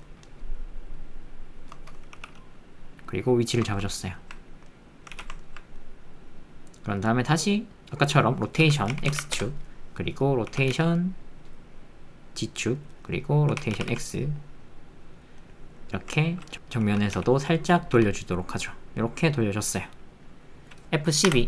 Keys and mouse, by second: 0.7 shift+click, 3.9 ctrl+middle click, 4.1 ctrl+middle click, 4.6 middle click, 5.1 alt+z, 5.4 ctrl+middle click, 5.7 middle click, 7.4 click, 9.1 KP_9, 9.1 KP_0, 9.3 KP_Enter, 10.2 click, 10.5 r, 10.7 z, 13.0 click, 13.5 r, 13.7 x, 14.3 x, 15.1 click, 15.4 click, 15.6 middle click, 15.7 click, 15.8 middle click, 15.9 click, 16.1 alt+middle click, 17.9 r.